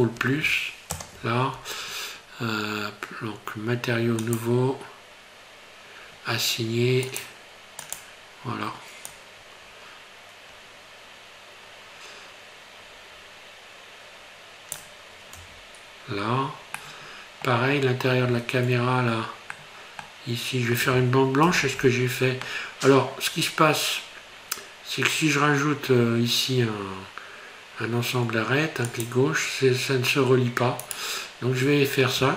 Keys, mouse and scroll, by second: 1.0 ctrl+KP_Add, 4.3 click, 7.1 click, 8.0 click, 15.4 Tab, 16.8 middle click, 17.9 scroll up 2, 18.3 Tab, 18.9 scroll up 2, 19.5 middle click, 21.5 ctrl+r.